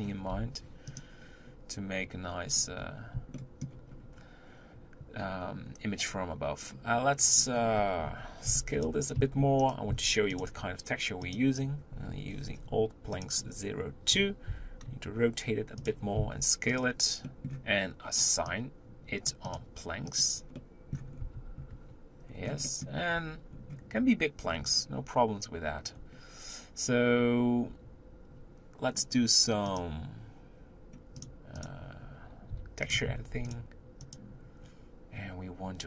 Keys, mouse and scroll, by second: 0.3 u, 2.4-3.3 scroll up 2, 3.3-5.7 shift+middle drag, 5.7-7.6 scroll down 1, 7.6-8.5 scroll down 5, 8.5 b, 9.9 s, 11.2 click, 14.5 r, 16.2 s, 17.3-18.5 middle drag, 18.5-19.6 drag, 20.1 click, 20.6 middle click, 21.1 scroll up 3, 21.4 Tab, 21.7 Tab, 22.3 scroll up 2, 22.8 middle click, 23.2 Tab, 23.5 scroll up 2, 24.5-25.1 scroll down 1, 26.0-27.1 scroll down 2, 29.8-35.8 drag.